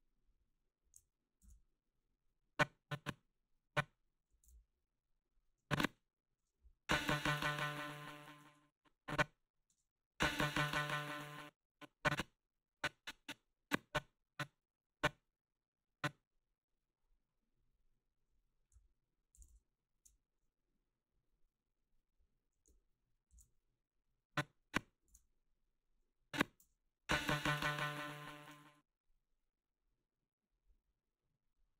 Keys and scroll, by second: 1.4 ctrl+c, 4.4 ctrl+v, 6.4 space, 8.5 space, 9.7 space, 11.2 space, 19.5 ctrl+v, 25.1 ctrl+v, 26.6 space, 28.5 space.